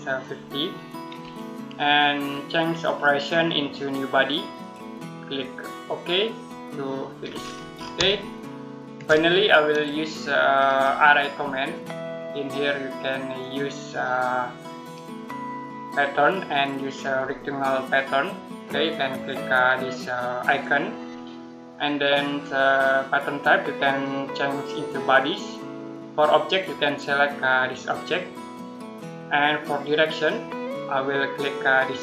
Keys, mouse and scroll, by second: 2.7 click, 7.1 scroll down 1, 7.2-7.8 scroll up 1, 8.0 shift+middle click, 9.1 middle click, 10.1 scroll down 1, 10.4 scroll up 1, 11.2 middle click, 13.2 click, 20.3 click, 23.7 click, 27.7 click.